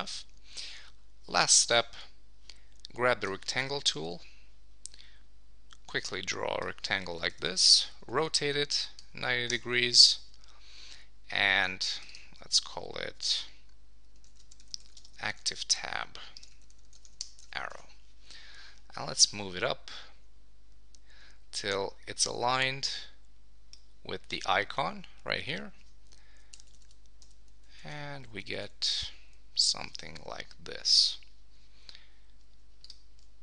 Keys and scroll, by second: 0.9 super+s, 7.3 Return, 7.8 super+y, 9.5 Return, 17.2 Return, 17.4 super+s, 26.5 Up, 27.2 Down, 27.9 Up, 30.0 super+s, 32.4 super+s.